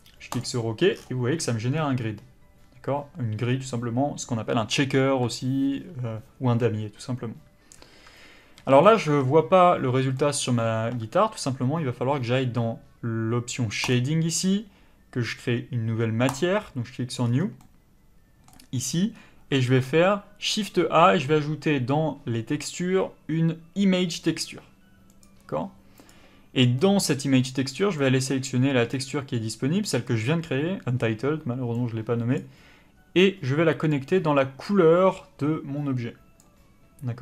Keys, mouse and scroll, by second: 7.7 Tab, 8.6 a, 8.8 middle click, 9.1 Tab, 10.2 middle click.